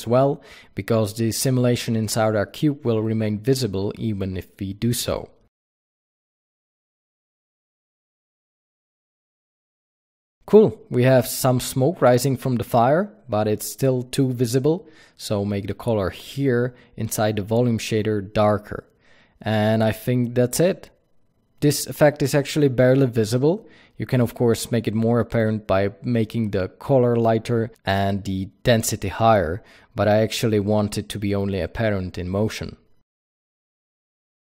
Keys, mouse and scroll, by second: 1.6 click, 2.5 click, 4.5 click, 15.6 click, 16.8 click, 32.1 click, 33.9 KP_0.